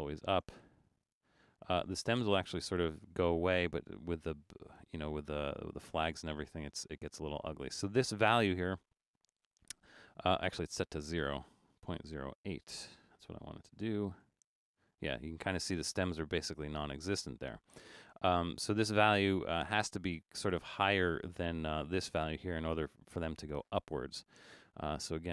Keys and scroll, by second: 11.5-12.8 typing.